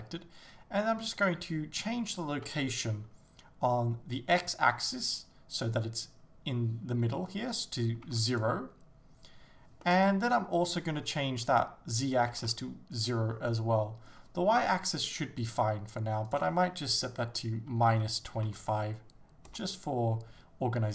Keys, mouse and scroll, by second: 8.3 click, 9.9-13.0 middle drag, 13.0 click, 13.5-19.5 middle drag, 19.5-20.9 drag, 19.6 Return.